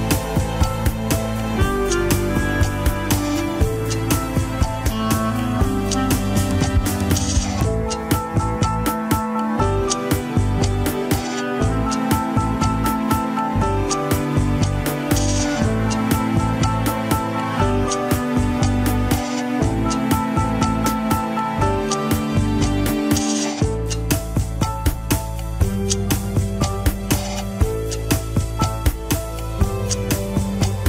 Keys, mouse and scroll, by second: 0.0 middle click, 0.4 alt+z, 0.5 middle click, 1.1 alt+z, 1.2 middle click, 1.9 click, 2.6 ctrl+Tab, 3.1 click, 3.4 shift+click, 4.9 click, 6.1 right click, 6.5 KP_1, 6.7 scroll down 5, 7.0-7.3 shift+middle drag, 7.3 scroll up 2, 8.0 click, 8.6 shift+click, 8.9-9.3 scroll up 1, 9.3 Tab, 9.9 ctrl+r, 16.3 KP_7, 17.0 s, 20.3 shift+z, 20.6 shift+middle click, 20.9 alt+z, 21.8 KP_1, 22.3 shift+click, 22.7 alt+z, 23.4 KP_7, 23.6 scroll up 2, 24.3 click, 24.9 scroll down 3, 25.0 alt+z, 25.9 click, 26.9 click, 27.2-27.5 scroll up 3, 27.5 click, 27.9 s, 28.7 click, 29.5 g.